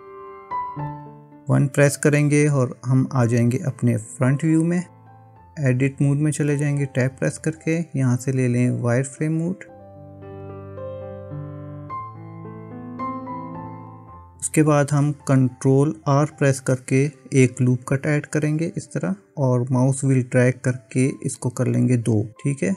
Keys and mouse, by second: 0.0 click, 2.5 KP_1, 5.8 Tab, 17.7 ctrl+r.